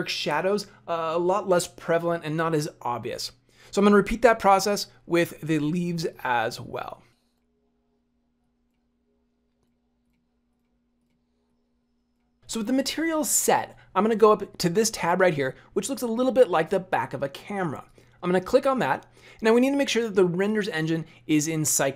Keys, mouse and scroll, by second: 5.0-6.0 scroll up 10, 6.0 click, 7.3 click, 8.4 click, 8.8-9.1 scroll down 10, 9.6 click, 10.9 click, 17.9 click.